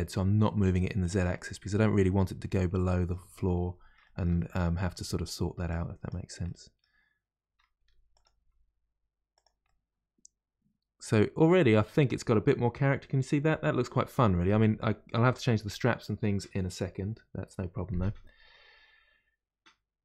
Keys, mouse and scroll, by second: 1.3-5.7 middle drag, 5.7 click, 6.4-7.8 middle drag, 7.8 r, 9.6-12.6 middle drag.